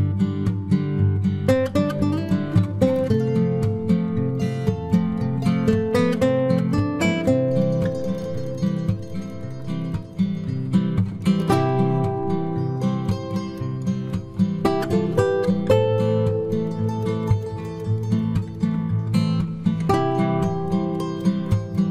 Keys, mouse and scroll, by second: 0.1 b, 0.4 g, 4.0 right click, 4.8 KP_Decimal, 5.9-7.1 middle drag, 9.2-11.2 middle drag, 11.2-13.7 right drag, 13.1-17.2 middle drag, 17.3-19.0 right drag, 18.2 c.